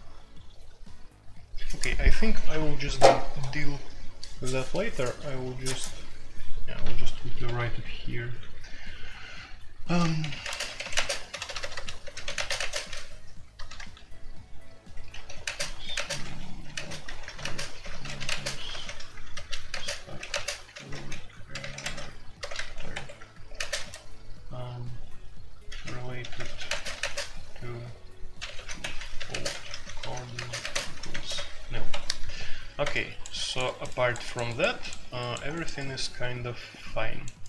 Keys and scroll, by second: 7.4-7.9 typing, 9.2-13.5 typing, 10.0 Return, 14.8-24.2 typing, 25.4-27.0 typing, 28.1-32.3 typing.